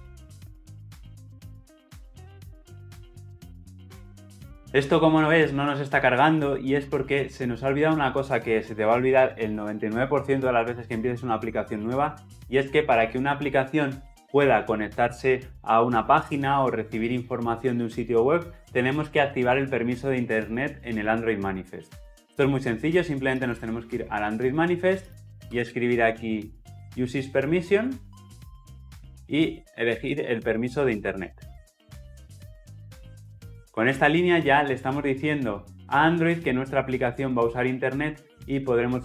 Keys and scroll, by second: 28.7 Return.